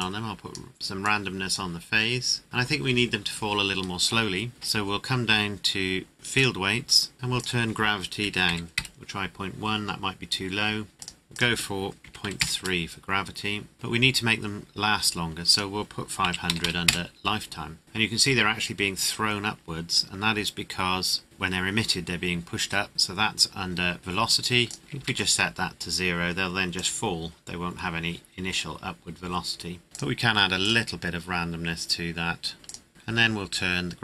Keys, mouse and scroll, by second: 0.0 click, 2.4-3.4 scroll up 1, 3.6-5.1 scroll down 1, 6.3 click, 6.8-7.4 scroll down 1, 7.4 click, 8.4 KP_1, 8.7 KP_Enter, 9.8 scroll down 1, 10.9-12.0 scroll up 1, 12.2 KP_3, 12.4 KP_Enter, 13.7 scroll up 1, 15.5 click, 16.2 KP_5, 16.4 KP_0, 16.8 KP_Enter, 17.8 click, 19.4-20.5 scroll up 1, 21.2 scroll down 1, 23.6-24.0 scroll down 1, 24.0-24.6 scroll up 1, 24.6 click, 25.0 KP_0, 25.0 KP_Enter, 26.7 click, 29.9 click, 32.6 click, 32.9 scroll down 1.